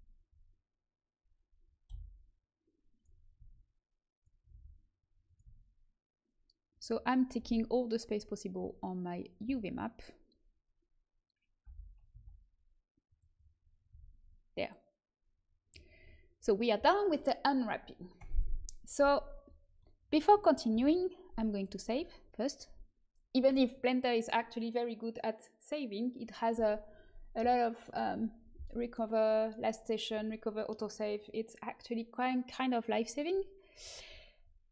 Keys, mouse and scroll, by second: 1.8 g, 3.3 s, 4.4 r, 5.4 s, 9.4 a, 11.6 l, 12.0 g, 13.8 a, 18.1 Tab, 20.6 ctrl+s, 27.8-34.7 drag.